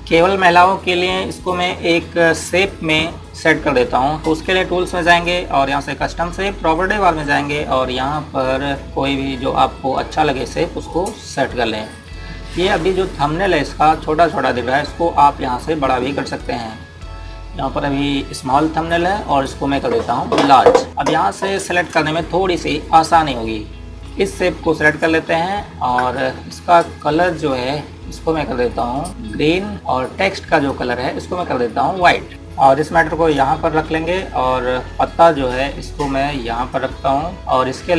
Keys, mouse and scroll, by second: 5.8 click, 10.8 click, 14.3 click, 20.9 click, 23.9 click, 32.3 z, 32.5 click.